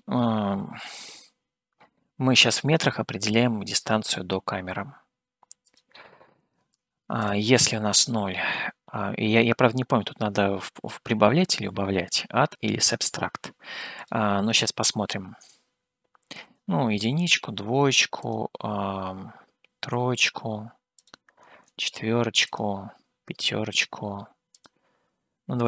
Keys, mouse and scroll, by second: 5.9-7.4 drag, 14.4-20.7 drag, 21.1 click, 22.6 click, 24.7-25.6 drag.